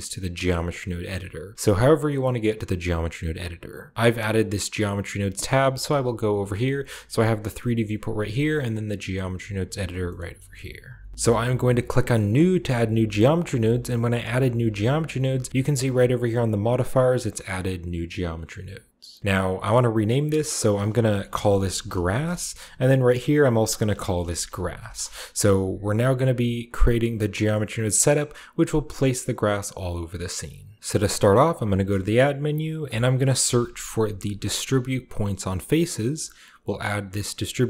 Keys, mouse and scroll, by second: 2.6 click, 5.6 click, 6.5-7.5 scroll down 1, 6.5 drag, 7.5-9.4 middle drag, 9.4-10.6 drag, 9.9-11.1 shift+middle drag, 10.1-11.1 shift+scroll down 1, 10.6 z, 12.2 click, 14.0 click, 20.2-21.7 drag, 21.2-21.9 typing, 22.1 Return, 23.3 click, 23.7-25.3 typing, 25.9 scroll down 1, 27.1 click, 27.1 typing, 30.2 click, 30.8-32.2 middle drag, 31.6 shift+a, 32.6 shift+click, 33.3 typing, 35.9 click.